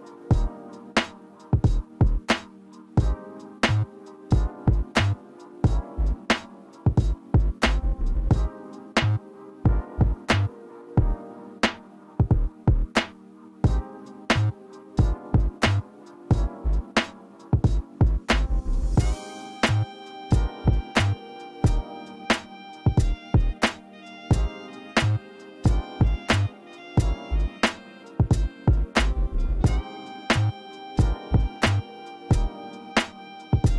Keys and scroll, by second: 7.6-8.3 typing.